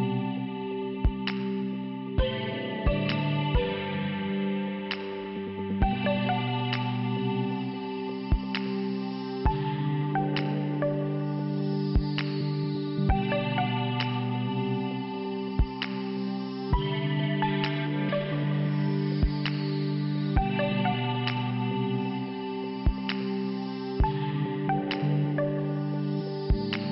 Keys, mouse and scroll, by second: 1.8 click, 1.9 click, 3.8 click, 3.9 click, 4.3 click, 4.5 double click, 4.5 double click, 4.8 double click, 4.9 double click, 5.1 double click, 5.2 double click, 5.3 double click, 5.4 double click, 5.7 double click, 5.8 double click, 7.3 click, 8.8 click, 8.9 click, 9.8 click, 9.8 click, 12.6 click, 12.7 click, 13.9 click, 14.0 click, 14.9 click, 18.7 click, 18.9 click, 20.1 click, 20.2 click, 21.1 click, 22.7 click, 22.8 click, 23.9 click.